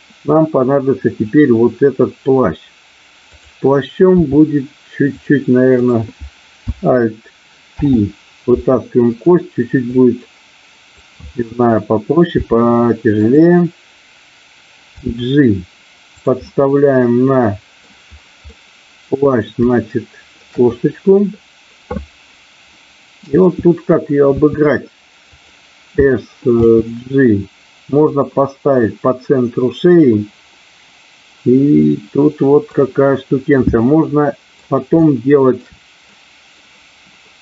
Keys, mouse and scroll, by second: 3.3 click, 4.2 e, 5.2 click, 7.7 alt+p, 10.0 click, 12.4 r, 13.2 click, 14.9 g, 16.0 click, 16.5-17.8 middle drag, 18.5 middle click, 19.8 shift+middle click, 22.7 middle click, 24.4 s, 25.2 click, 26.7 g, 28.0 click, 31.8 middle click, 33.7 middle click, 35.0 shift+middle click, 36.2 middle click.